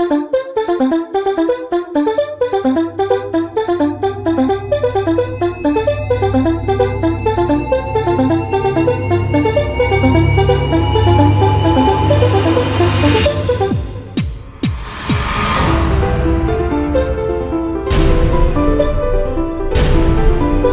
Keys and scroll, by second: 8.8 ctrl+s.